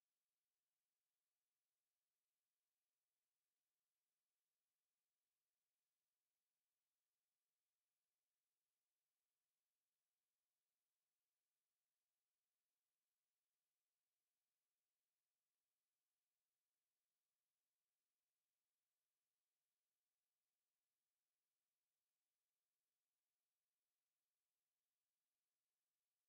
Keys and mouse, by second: 17.2 alt+click, 17.5 alt+right click, 19.3 ctrl+d, 20.9 alt+click, 22.5 alt+right click, 22.9 alt+click, 23.5 alt+middle click, 23.9 alt+click, 25.3 r.